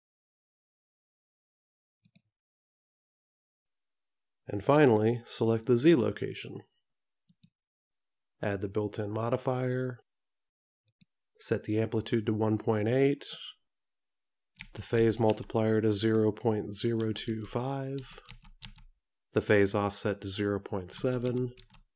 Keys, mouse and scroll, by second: 7.5 click, 9.8 click, 12.9 click.